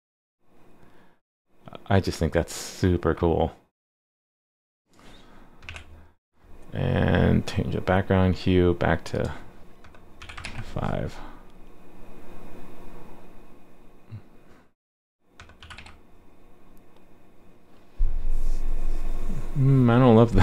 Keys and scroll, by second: 10.4 super+s, 15.7 super+s.